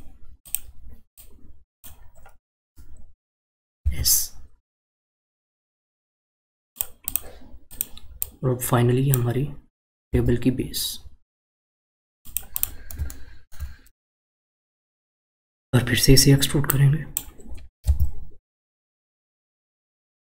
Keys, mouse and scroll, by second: 0.4 click, 1.1 click, 3.8 s, 7.1 click, 7.7 click, 8.2 click, 10.1 e, 12.6 click, 13.1-14.4 shift+middle drag, 16.7 click, 17.8 e.